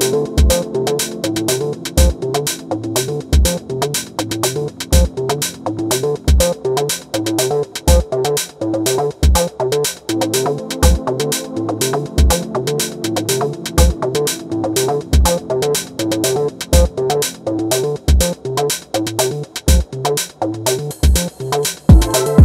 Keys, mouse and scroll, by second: 1.0 t, 1.3 r, 3.7 click, 6.1 scroll down 1, 6.1 middle click, 6.6 KP_1, 7.2-10.2 shift+middle drag, 10.2 click, 11.5 ctrl+shift+click, 12.4 KP_1, 13.2 click, 18.6-19.0 scroll down 2, 19.0-20.5 middle drag, 20.5 KP_7, 21.2 r.